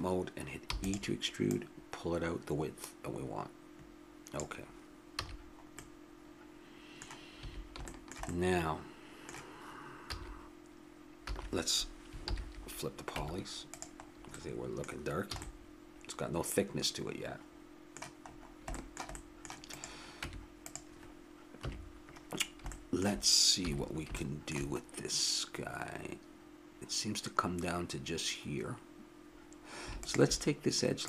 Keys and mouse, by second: 0.6 e, 1.4-3.2 drag, 5.2 a, 7.4 a, 10.0 a, 11.3 a, 12.2 ctrl+n, 13.2 Tab, 15.3 a, 16.0-17.2 middle drag, 18.8 middle click, 19.7-20.9 drag, 20.2 Tab, 21.6 KP_3, 23.6 a, 30.0-31.0 right drag.